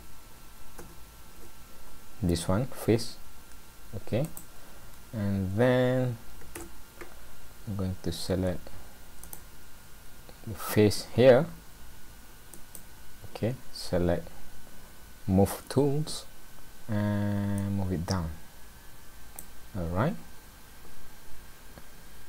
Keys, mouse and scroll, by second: 6.6 click, 6.6 scroll down 2, 7.5-9.3 scroll up 2, 9.3 click, 10.1 scroll up 1, 12.5 click, 17.6 click.